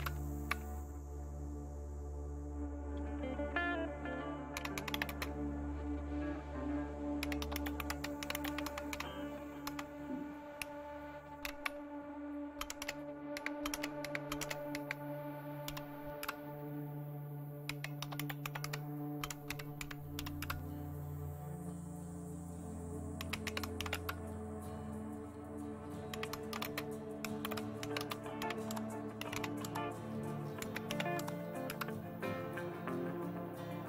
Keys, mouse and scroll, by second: 0.0 super+Return, 4.4-5.4 typing, 7.2-9.7 typing, 11.4 typing, 12.6-20.9 typing, 23.0-24.3 typing, 26.1-31.1 typing, 31.2 Tab, 31.7 Return.